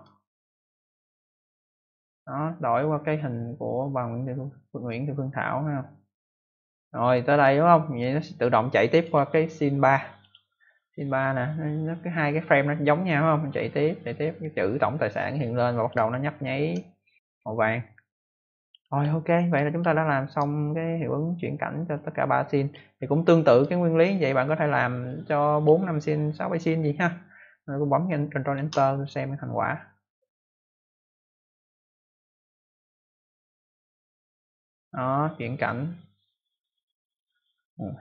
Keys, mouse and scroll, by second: 0.5 click, 8.9 click, 10.1 click, 13.0 click, 16.1 ctrl+alt+scroll up 1, 17.1 click, 19.0 ctrl+alt+scroll down 1, 19.8 ctrl+alt+scroll down 1, 21.9 click, 23.1-23.6 ctrl+alt+scroll down 1, 25.0 click, 28.5 ctrl+Return.